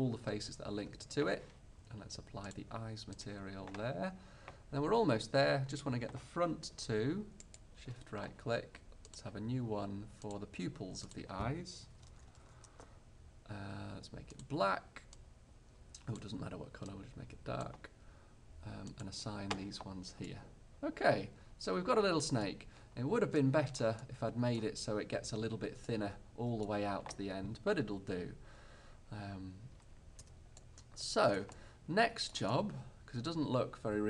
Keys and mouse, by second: 4.9-9.3 middle drag, 9.3-13.1 drag, 14.4-16.5 drag, 19.0-20.4 drag, 22.6-33.4 middle drag, 30.3 Tab.